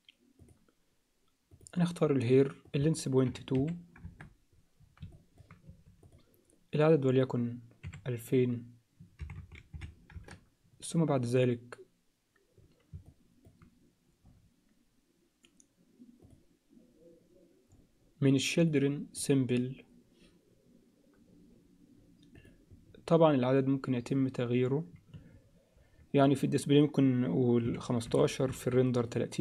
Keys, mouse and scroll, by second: 2.7-4.6 drag, 5.1 alt+middle click, 5.7 s, 7.1-10.4 drag, 9.3 0, 13.0 alt+middle click, 16.3 click, 19.2 click, 22.5-26.0 drag, 26.2-28.6 drag, 28.9-29.4 drag.